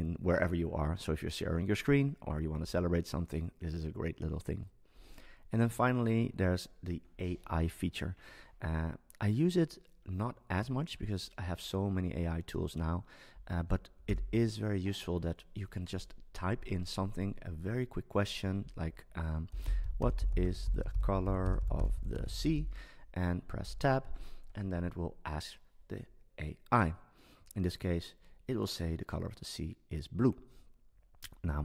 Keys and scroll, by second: 14.0 super+space.